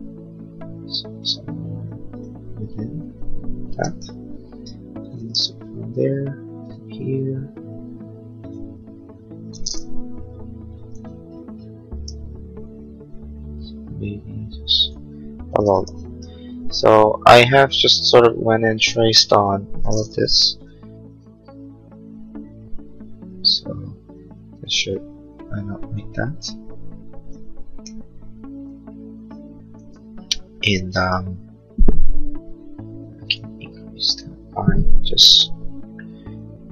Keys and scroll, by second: 10.1 l, 15.5 space, 16.3 space, 30.0 Escape.